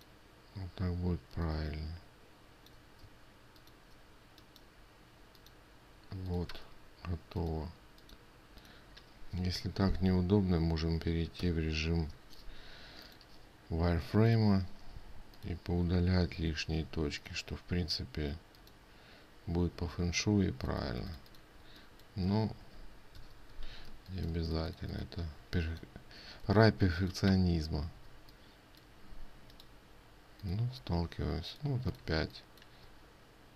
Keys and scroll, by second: 12.0 ctrl+y, 21.4 ctrl+space, 23.7 ctrl+y, 27.0 ctrl+space, 32.7 ctrl+space.